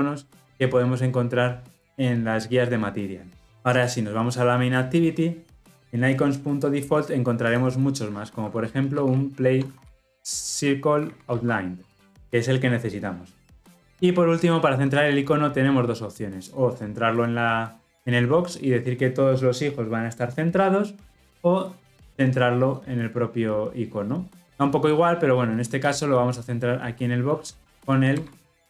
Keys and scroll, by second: 11.8 Return.